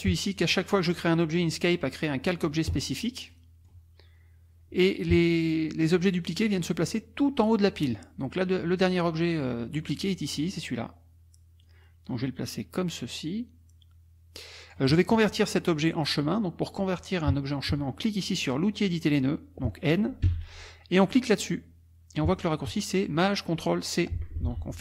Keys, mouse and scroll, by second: 3.3 click, 11.6-14.9 drag, 20.2 n.